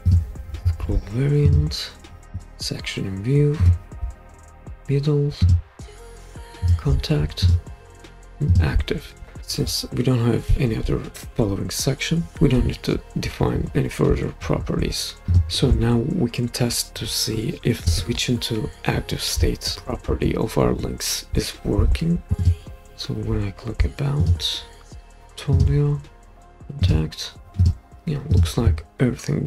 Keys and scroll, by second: 17.8 super+p.